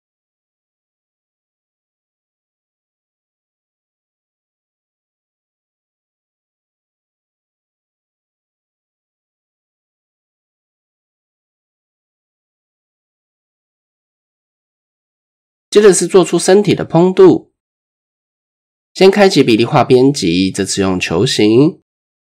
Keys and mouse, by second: 0.5 click, 1.9 click, 2.0 typing, 2.2 click, 2.5 Tab, 3.0 shift+middle click, 3.6 click, 4.5-6.0 drag, 9.0 click, 9.3 Tab, 9.9 shift+click, 14.1-14.5 shift+drag, 15.0 Tab, 19.8 click, 21.0-22.3 drag.